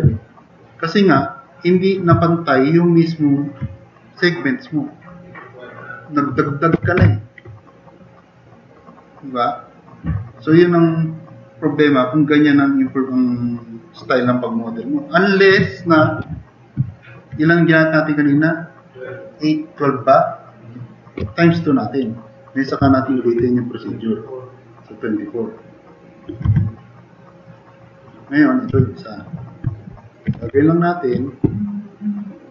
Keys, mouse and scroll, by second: 2.2 drag, 3.2 drag, 6.5-7.5 typing, 7.8 click, 8.6 drag, 9.0 click, 23.0-23.3 drag, 26.5 4, 28.7 Delete, 30.3 e.